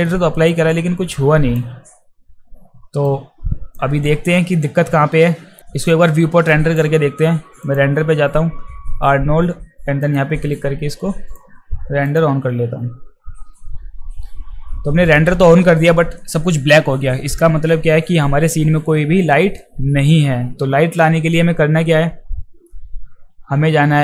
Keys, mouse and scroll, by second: 0.5-1.6 alt+drag, 3.1 click, 6.5 alt+right click, 7.6 click, 10.0 click, 10.9-11.3 drag, 12.0 click.